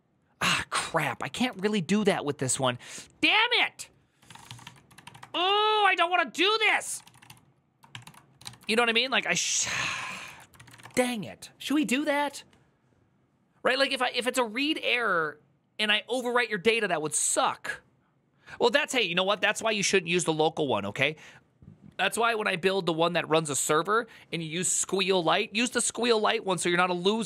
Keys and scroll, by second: 4.1-11.0 typing, 10.0 ctrl+u, 19.0-19.8 typing.